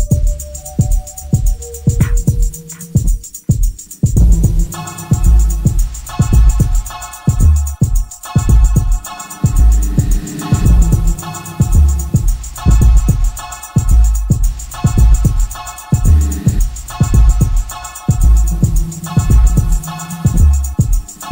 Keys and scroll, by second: 0.1 3, 0.6 4, 1.0 2, 4.7 ], 5.6 ], 6.9 ], 9.6 ], 10.5 ], 12.0 4, 17.5 ctrl+d, 17.6 Escape.